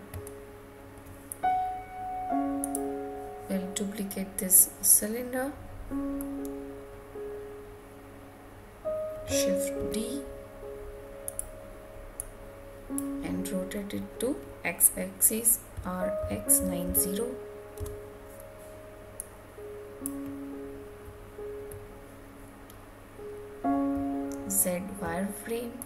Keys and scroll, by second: 17.7 Return.